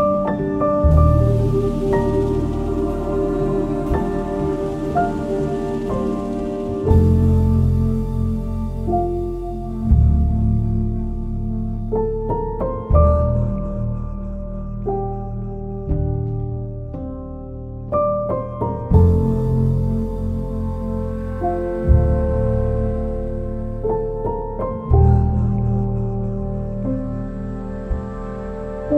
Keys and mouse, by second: 1.1 g, 2.4 click, 2.8 2, 4.0 shift+click, 4.4 shift+click, 5.0 shift+click, 5.8 shift+click, 6.8 shift+click, 8.0 ctrl+b, 10.0 click, 10.5 shift+middle click, 11.8 click, 12.6 g, 13.2 click, 15.3 1, 15.5 click, 16.9 j, 17.5 click, 17.9 shift+click, 18.7 j, 20.4 j, 21.2 click, 21.6 shift+click, 23.3 j, 23.8 click, 25.0 j, 25.5 click, 25.8 shift+click, 26.6 j, 27.2 click, 28.4 j.